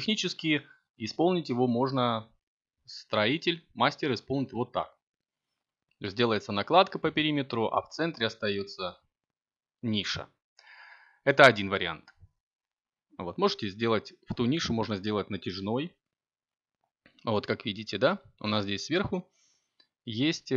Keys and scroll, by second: 15.1 Tab.